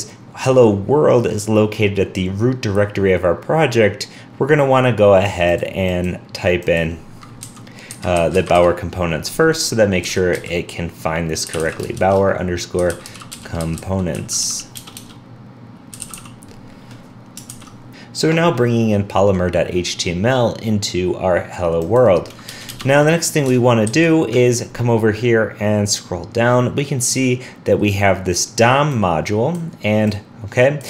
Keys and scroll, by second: 17.5 super+s, 23.9 alt+super+Right.